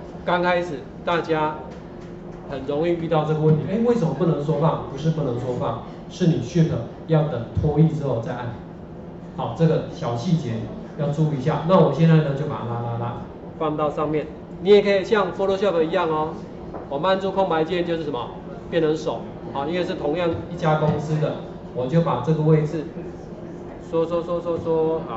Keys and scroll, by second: 14.2 space.